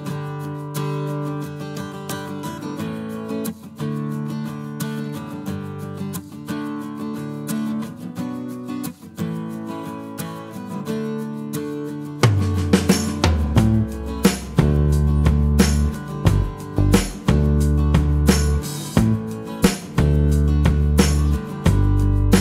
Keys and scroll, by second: 10.6 a, 11.0 w, 12.2 s, 15.0 w, 15.9 s, 17.7 a, 18.6 w, 19.7 s.